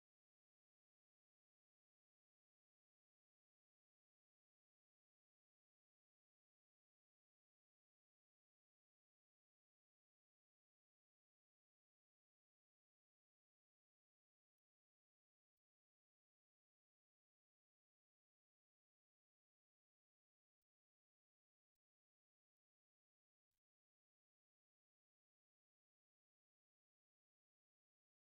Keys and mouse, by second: 0.8 ctrl+r, 2.2 ctrl+r, 3.4 ctrl+r, 4.3 ctrl+r, 6.6 right click, 7.2 ctrl+z, 7.3 ctrl+z, 8.2 right click, 8.9 ctrl+r, 10.4 ctrl+r, 11.9 right click, 13.6 right click, 16.5 right click, 17.9 right click, 20.2 right click, 21.6 alt+right click, 23.5 w, 23.6 w, 27.9 alt+right click.